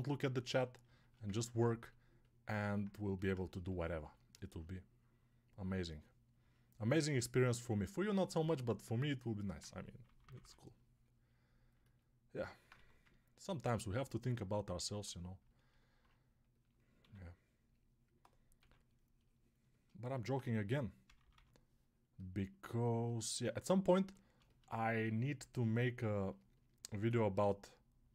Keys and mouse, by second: 12.6 1, 16.9 2, 18.4 6, 20.5 g, 20.9 ].